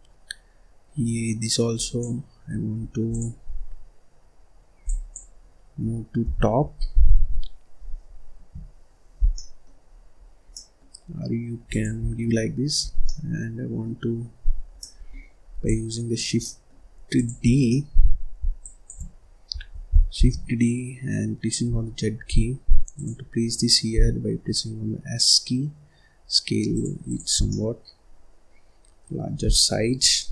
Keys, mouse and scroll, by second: 1.7 click, 2.9 click, 3.3-4.7 scroll up 5, 4.7 click, 5.3-6.1 scroll down 5, 6.1 g, 8.5-9.1 scroll down 1, 9.1-9.8 scroll down 5, 9.3 middle click, 9.8-10.4 scroll up 4, 10.4 middle click, 10.8-11.6 scroll up 2, 11.6 click, 11.9-12.4 scroll down 1, 12.4-12.7 scroll up 2, 12.7 scroll down 1, 12.9 middle click, 13.9-14.7 scroll up 2, 14.7 middle click, 15.5 click, 16.3 middle click, 16.7-17.0 scroll up 1, 17.0 click, 17.4 scroll down 2, 17.6 middle click, 18.5 shift+click, 20.1 shift+d, 23.8 s, 26.9 click, 27.2 scroll down 2, 27.4-29.4 middle drag, 29.4 scroll down 1, 29.6-30.0 scroll up 1, 30.0-30.3 middle drag.